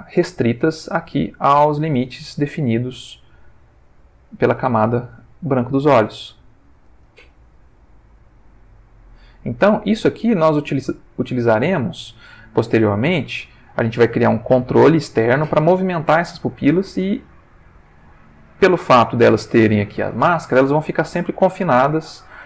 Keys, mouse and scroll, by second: 0.2 Tab, 0.6 g, 1.6 click, 2.0 Tab, 2.7 Tab, 3.2 g, 4.2 click, 4.7 Tab, 6.7 Tab, 7.2 g, 9.2 click, 10.8 g, 11.5 click, 12.2 Tab, 12.9 ctrl+middle click.